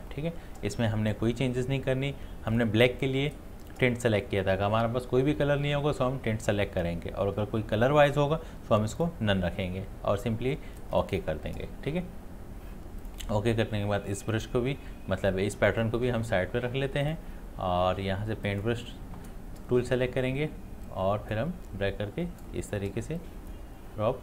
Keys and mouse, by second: 9.0-17.0 drag, 20.9-24.2 drag.